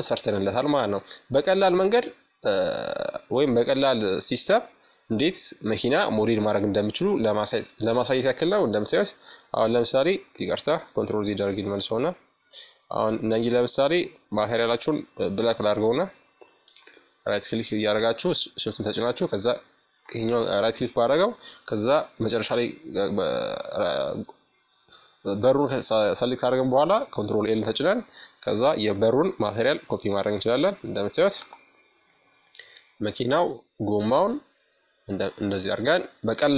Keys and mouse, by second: 3.3-4.9 middle drag, 4.9-6.5 drag, 5.8-7.4 middle drag, 6.9-8.0 drag, 8.0 middle click, 8.8 ctrl+z, 8.8 right click, 9.6 ctrl+z, 10.7-13.7 right drag, 13.7 middle click, 14.4-17.4 right drag, 17.7-19.6 right drag, 24.9 ctrl+l, 29.0-31.5 right drag, 31.5 middle click, 32.0-36.5 middle drag.